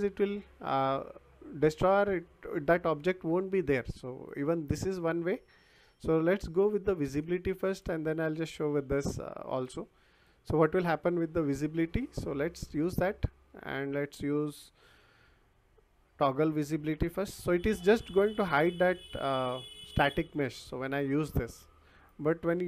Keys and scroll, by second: 16.8 t, 17.2 o.